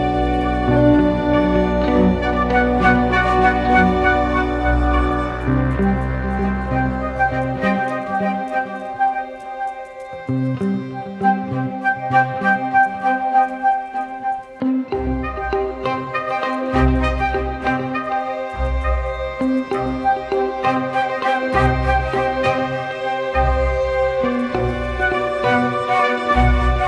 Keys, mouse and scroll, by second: 0.1-0.4 typing, 3.2 right click, 7.7 typing, 8.2 double click, 11.4-11.9 typing, 15.5 right click, 17.8 double click, 23.8 double click, 25.5 right click.